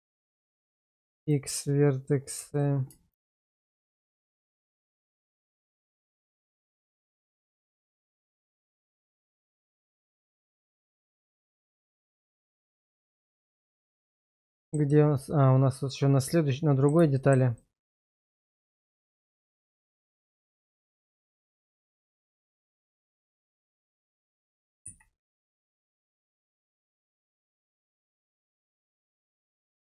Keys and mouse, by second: 0.9 x, 2.5 alt+click, 3.2 alt+shift+click, 4.3 shift+1, 4.7 shift+middle click, 5.8 middle click, 8.4 click, 9.1 x, 10.6 alt+click, 11.1 alt+shift+click, 12.1 shift+1, 13.1 shift+middle click, 14.0 shift+middle click, 14.5 shift+middle click, 15.2-17.0 middle drag, 17.2 shift+middle click, 17.6 middle click, 18.6 shift+middle click, 19.6 middle click, 20.2 shift+middle click, 21.0 middle click, 22.5 shift+click, 24.8 x, 26.2 alt+click, 26.7 alt+shift+click, 27.5 shift+1, 28.0 shift+middle click, 29.5 shift+middle click.